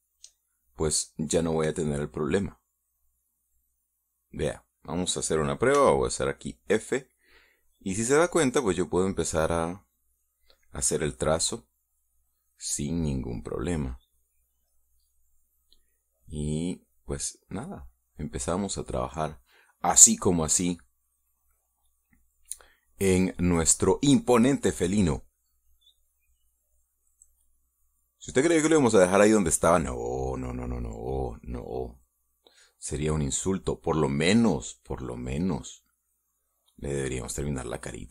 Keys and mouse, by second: 1.3 shift+middle click, 2.1-5.7 middle drag, 6.5 f, 7.8 click, 9.0 click, 9.6 click, 10.0 click, 10.4 click, 10.8 click, 11.5 click, 11.7 click, 13.8-15.2 drag, 15.4 middle click, 16.9-18.1 drag, 18.3-19.3 drag, 19.4-21.4 drag, 21.8-23.6 drag, 25.8-27.0 drag, 30.7-32.9 drag, 36.0-38.1 drag.